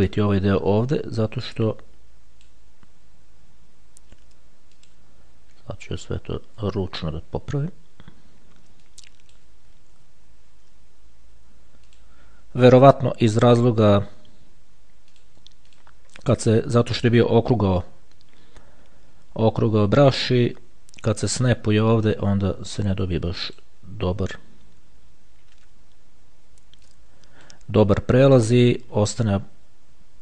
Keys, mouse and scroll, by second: 1.0 ctrl+z, 1.7-3.2 drag, 5.0 click, 6.1-7.1 shift+scroll down 2, 7.1 shift+scroll down 1, 9.1 click, 10.3 ctrl+z, 12.2 click, 15.3 click, 20.5-22.0 drag, 23.2 click, 27.1 click, 28.5-29.1 shift+scroll down 2.